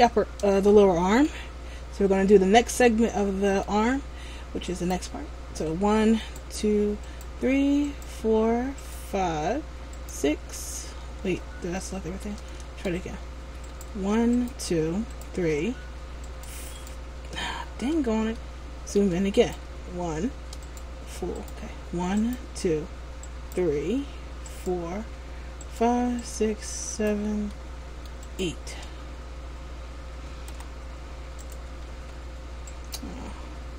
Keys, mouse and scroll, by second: 0.8 shift+middle click, 1.6 scroll up 1, 2.8 shift+middle click, 4.8 right click, 6.4 shift+right click, 9.0 shift+right click, 10.1 shift+right click, 11.9 shift+middle click, 12.8 a, 13.2 scroll up 1, 13.8 right click, 14.5 shift+right click, 15.3 shift+right click, 16.4 right click, 16.9 shift+right click, 17.5 scroll up 1, 18.5 shift+middle click, 18.5 scroll up 1, 19.6 right click, 22.3 shift+right click, 23.4 shift+right click, 24.6 shift+right click, 25.7 shift+right click, 27.6 shift+middle click, 28.4 shift+right click, 29.4 scroll down 2, 30.6 g, 32.0 ctrl+z, 32.8 right click.